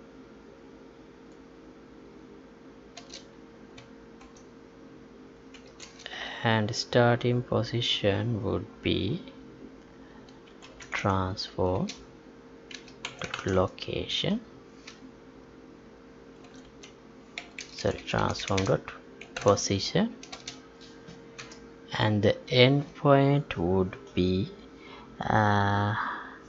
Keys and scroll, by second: 6.1 Left.